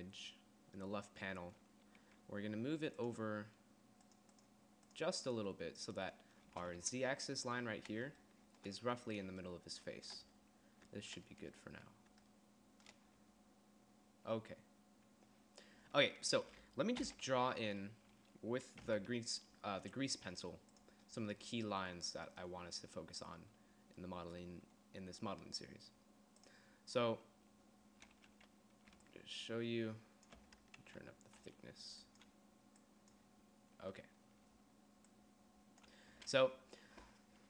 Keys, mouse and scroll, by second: 17.2 n, 19.0 n, 29.1-30.6 d, 31.0 ctrl+z, 32.2 d, 34.7 d, 35.2-36.3 d.